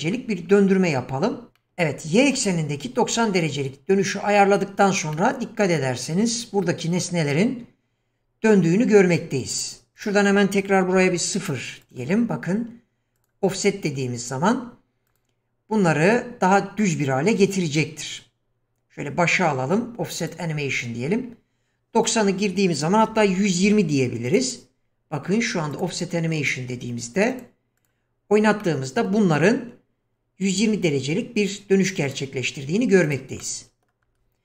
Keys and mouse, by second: 1.6-2.3 shift+middle drag, 5.1-5.7 middle drag, 10.0-11.9 drag, 13.3 click, 15.1 click, 22.0-24.4 drag, 25.8 click, 27.4 click, 27.8 click, 28.6-29.1 middle drag, 33.1 click, 33.4-33.9 middle drag.